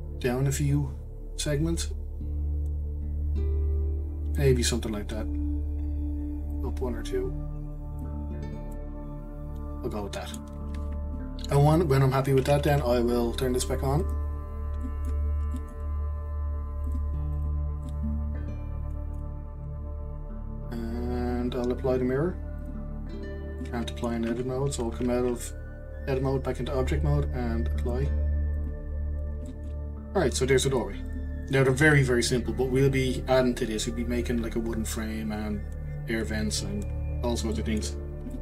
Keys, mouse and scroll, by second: 4.7-5.6 scroll down 3, 5.6-6.5 scroll up 1, 6.5 click, 8.3-8.6 scroll down 3, 8.7-10.7 middle drag, 10.7-12.2 scroll up 1, 12.2-14.0 scroll up 2, 14.0 scroll up 1, 14.0-14.5 drag, 14.5-14.8 scroll down 2, 14.8 middle click, 15.2-15.6 scroll down 3, 15.6-16.8 middle drag, 16.8 click, 17.8-20.9 middle drag, 22.6 click, 23.6 middle click, 24.3 Tab, 25.1-27.8 scroll up 3, 27.8-29.1 drag, 29.1-29.4 scroll down 2, 29.4-30.7 shift+middle drag, 30.7 drag, 31.1 click, 31.4 click, 37.5 middle click, 38.0-38.3 scroll up 1, 38.3-38.4 shift+middle drag.